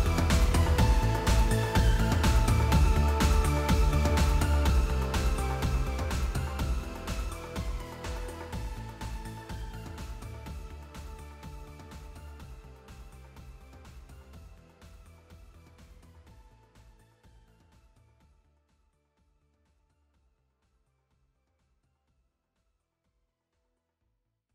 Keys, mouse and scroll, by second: 3.1-4.1 typing, 5.6-7.8 typing, 8.9-10.4 typing, 11.9 click, 12.0 click, 14.9 space, 17.8 space, 18.1 space, 19.7 space, 20.0 space, 22.3-24.5 typing.